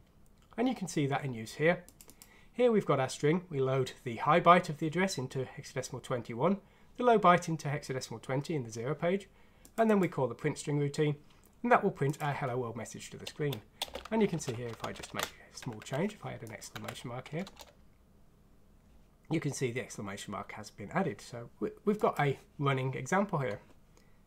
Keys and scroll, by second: 13.8 space, 14.9 typing, 16.7 F6, 17.4 Return.